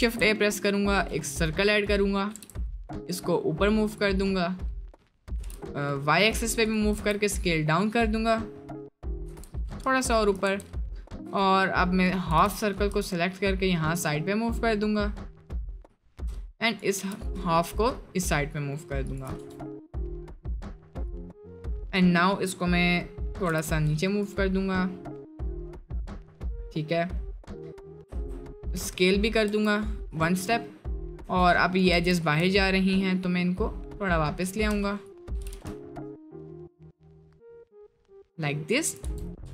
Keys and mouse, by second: 0.0 shift+a, 1.7 click, 2.3 g, 7.0 s, 9.2 g, 10.5 Tab, 11.1 1, 11.5 click, 12.3 g, 16.7 click, 17.0 g, 19.4 Tab, 19.6-20.1 middle drag, 23.5 g, 25.2-25.6 middle drag, 25.8 middle drag, 26.3 middle click, 28.1 s, 28.8 s, 31.0 click, 31.2 Tab, 31.5 click, 31.9 g, 35.4 g, 39.1 Tab.